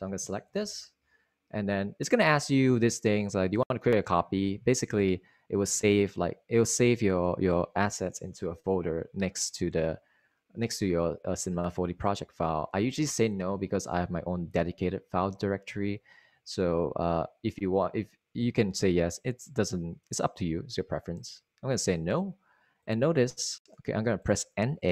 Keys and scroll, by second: 1.5 Return, 3.5 space.